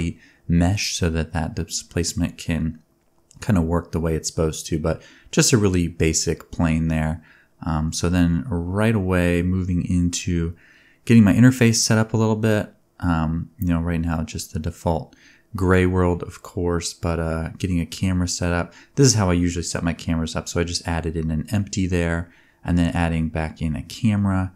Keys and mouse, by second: 0.0-2.5 shift+middle drag, 2.5-7.3 drag, 4.8 n, 4.9 t, 7.3-9.6 middle drag, 9.6 click, 10.7 shift+a, 12.8 g, 14.1 shift+a, 15.3 alt+g, 15.4 alt+r, 15.8-17.4 drag, 16.3 e, 16.9 g, 17.4-18.3 ctrl+middle drag, 18.3 r, 19.4 r, 20.7 shift+click, 21.3 ctrl+p, 22.7 KP_0, 23.7 click, 24.0 r, 24.1-24.5 middle drag.